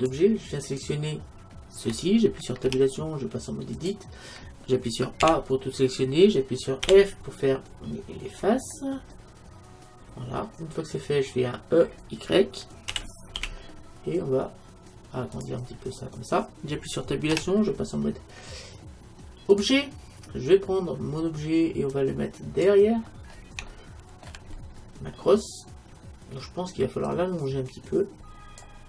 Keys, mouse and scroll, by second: 0.7-2.6 right drag, 2.7 Tab, 5.3 a, 6.9 f, 8.4 middle click, 10.3-12.8 middle drag, 12.9 e, 15.8 middle click, 17.4 Tab, 22.0-23.9 drag, 23.7-27.1 middle drag, 27.1-28.8 drag.